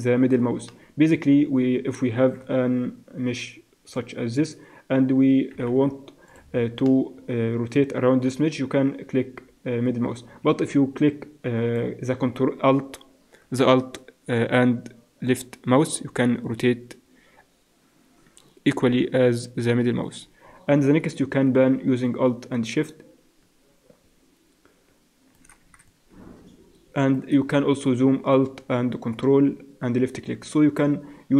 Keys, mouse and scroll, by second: 2.2 click, 2.2 shift+a, 5.5 s, 7.4-8.7 middle drag, 16.8 middle click.